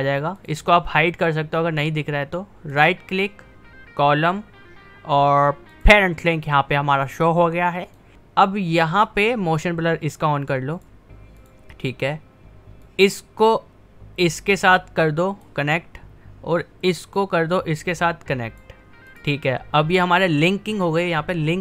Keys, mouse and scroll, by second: 0.4 click, 2.8 right click, 5.8 click, 10.8-19.1 drag.